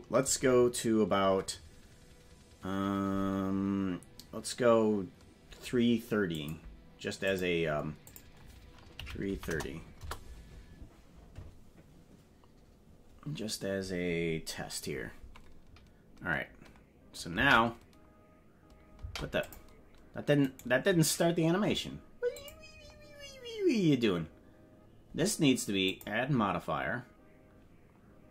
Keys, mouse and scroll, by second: 6.3 click, 8.1-15.1 drag, 9.3 KP_3, 17.5 space, 19.0 space, 19.4 click, 20.4 right click, 22.3 click, 25.9-28.3 drag.